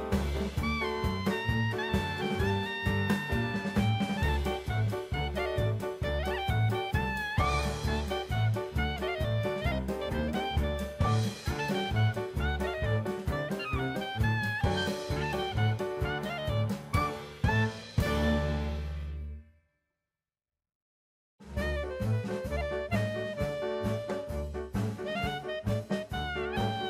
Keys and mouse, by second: 2.6-4.0 drag, 6.9 drag, 7.8 click, 9.4-10.8 drag, 11.3-12.2 drag, 12.6-13.9 drag, 15.2-16.0 middle drag, 17.0-17.4 middle drag, 19.3 middle click, 20.1 shift+a, 24.0 middle click, 25.6-26.6 drag.